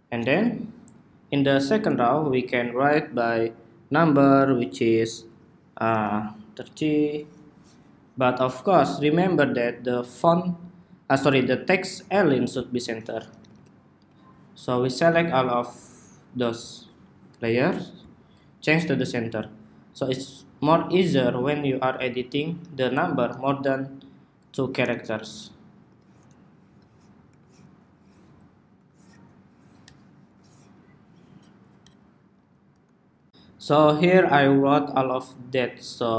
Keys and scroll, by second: 23.0 ↺, 24.7 ↺, 26.1 ↺, 27.7 Escape, 29.1 Escape, 30.8 ↺, 32.1 super+s.